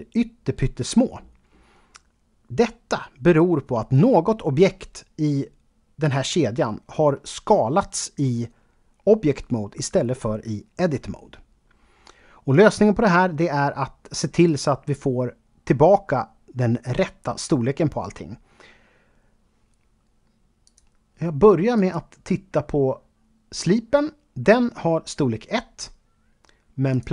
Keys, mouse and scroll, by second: 20.7 click, 21.8 click, 26.9 click.